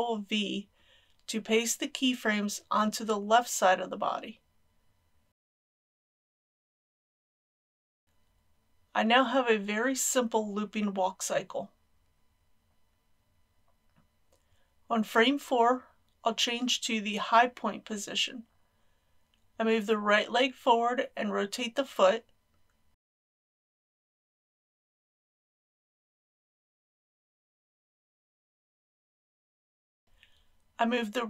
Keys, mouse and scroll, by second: 2.0 ctrl+shift+v, 4.6-8.3 middle drag, 9.3-15.3 drag, 23.6 g, 25.3 x, 27.1 click, 27.2 r, 28.7 click.